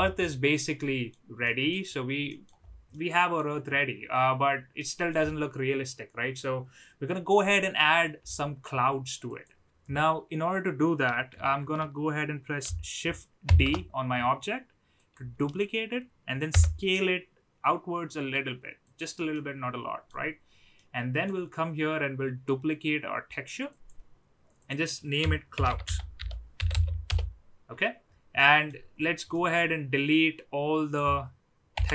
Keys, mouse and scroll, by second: 0.2-1.0 middle drag, 1.3 middle drag, 2.2 middle click, 2.8-3.3 middle drag, 4.7 middle click, 13.4 shift+d, 17.2 s, 19.3-20.0 middle drag, 20.0 scroll down 1, 20.7 middle click, 23.7 click, 24.7-27.7 drag, 28.3 middle click, 29.4 middle click, 30.0 click, 31.7 Delete.